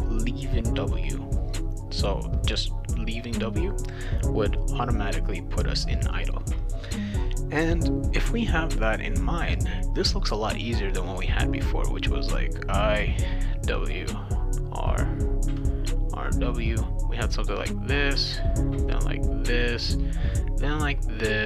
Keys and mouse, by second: 11.7 click, 12.2 click, 12.9 click, 14.0 click, 14.3 click, 15.1 click, 16.2 click, 17.2 click, 17.8 click, 18.7 click, 19.2 click, 20.1 click, 20.7 click.